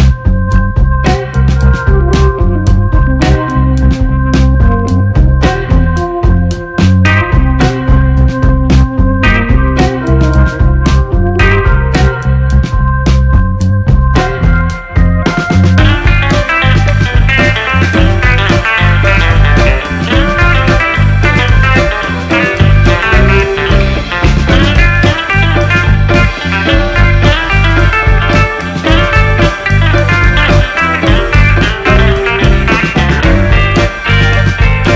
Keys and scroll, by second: 0.1-1.6 typing, 3.3 shift+r, 3.5 e, 3.7 u, 4.0 r, 6.0-16.0 typing, 26.4 BackSpace, 28.2 space, 29.4 space, 33.8 Delete.